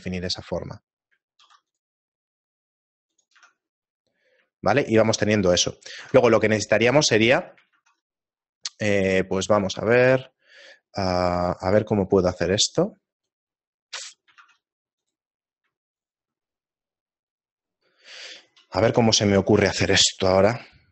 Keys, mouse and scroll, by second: 0.7 middle click, 1.6 ctrl+r, 3.4 Tab, 3.8 scroll down 1, 4.4-4.9 scroll down 2, 4.9 shift+middle click, 6.2 Tab, 6.2-6.7 scroll up 3, 7.7 ctrl+Tab, 13.1 ctrl+alt+right click, 14.4 ctrl+Tab, 15.9 alt+right click, 16.5 middle click, 17.3-18.1 scroll down 2, 20.7 shift+middle click.